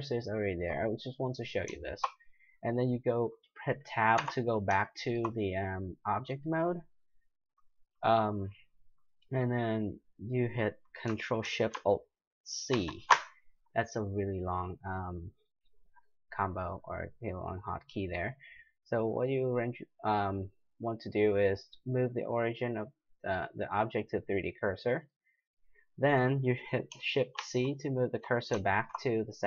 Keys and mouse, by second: 1.8 middle click, 4.2 Tab, 4.9 middle drag, 5.6 middle click, 5.7 middle click, 12.7 ctrl+alt+shift+c, 27.4 shift+c, 28.6-29.4 middle drag.